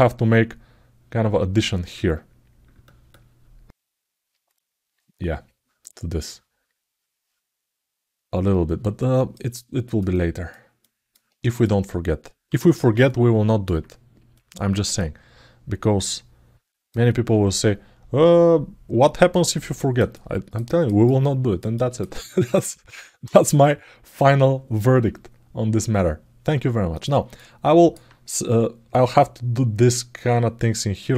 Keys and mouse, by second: 8.7 click, 9.3 alt+middle click, 9.9 alt+shift+middle click, 10.5 alt+middle click, 11.3 click, 12.8 alt+middle click, 14.1 click, 15.8 click, 16.8 alt+middle click, 18.0-19.3 alt+middle drag, 19.7 alt+middle click, 19.9 alt+middle click, 20.9 alt+middle click, 21.5 alt+shift+middle click, 26.7 click, 27.1 alt+middle click.